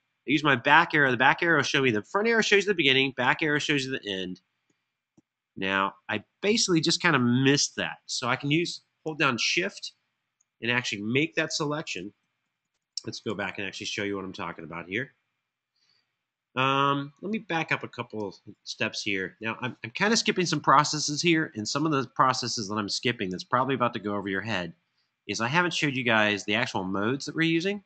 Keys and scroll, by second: 0.3 Right, 0.8 Left, 4.4 Right, 4.8 Right, 11.8 super+[, 12.2 super+[, 12.4 super+[, 12.5 super+[, 18.3 super+], 20.3 super+].